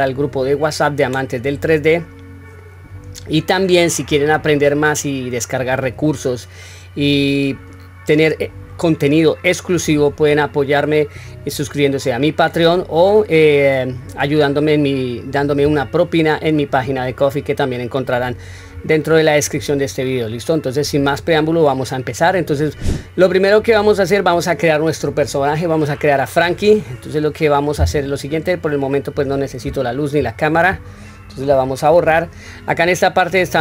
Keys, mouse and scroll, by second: 21.8-23.3 middle drag, 23.8 middle click, 24.8 middle click, 28.4 click, 30.4 shift+click, 31.5 Delete.